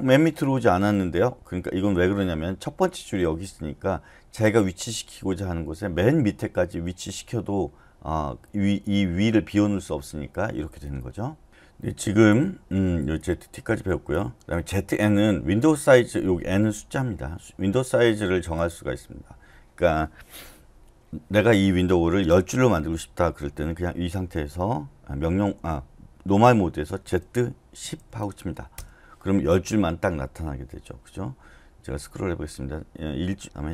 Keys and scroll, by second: 27.0-28.4 typing, 28.7 Return.